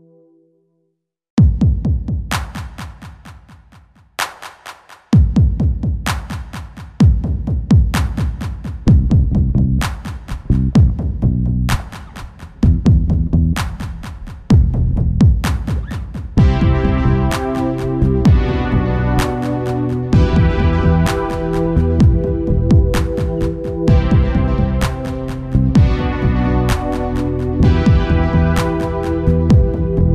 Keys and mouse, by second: 0.4 ctrl+s, 1.3 Tab, 3.3 Tab, 3.6 a, 3.8 right click, 3.9 a, 4.6 a, 5.3 u, 6.2 Return, 21.3 Tab, 23.5 Tab, 23.8 a, 24.6 u, 25.4 Return, 28.1 click.